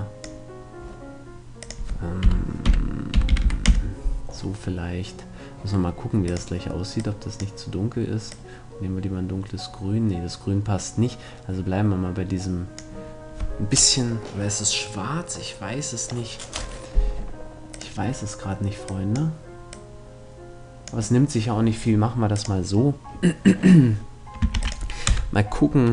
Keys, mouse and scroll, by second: 1.2-3.2 drag, 5.9-7.6 drag, 17.3-19.1 drag, 22.0-23.8 drag, 24.2 ctrl+s, 24.7 KP_0.